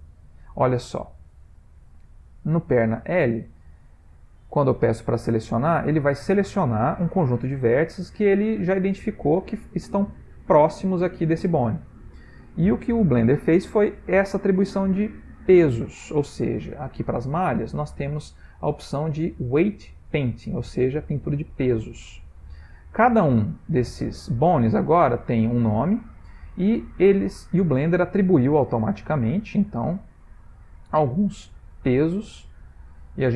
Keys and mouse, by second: 1.7 middle click, 1.8 middle click, 3.4 middle click, 3.5 middle click, 5.4-8.3 middle click, 8.1 middle click, 8.2 middle click, 8.7-9.1 middle click, 8.9 middle click, 10.9 middle click, 11.5 middle click, 12.6 Tab, 13.1 middle click, 14.4 shift+middle click, 17.7 click, 23.1 click, 24.0 click, 25.3 middle click, 29.5 click, 30.8 middle click, 30.8 middle click.